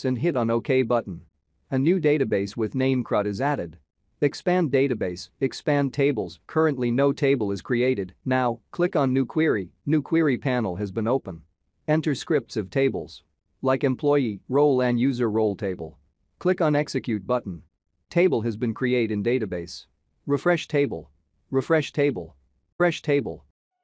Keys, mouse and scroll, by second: 0.4 shift+c, 2.0 shift+d, 3.9 click, 8.7 click, 18.2 click, 20.1 click, 23.2 click.